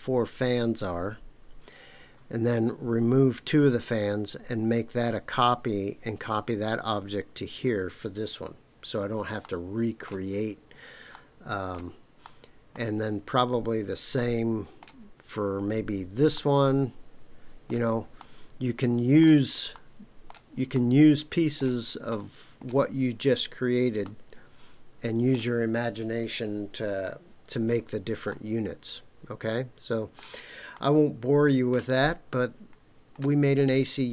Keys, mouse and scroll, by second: 9.4-10.1 shift+middle drag, 11.1-11.7 shift+middle drag, 12.2-12.7 shift+middle drag, 14.1-14.8 shift+middle drag, 16.3-17.7 shift+middle drag, 18.2-19.2 shift+middle drag, 19.7 shift+middle click, 20.7 shift+middle click, 22.1-22.6 shift+middle drag, 24.0-25.4 shift+middle drag, 28.3-30.2 shift+middle drag, 30.7-33.2 middle drag.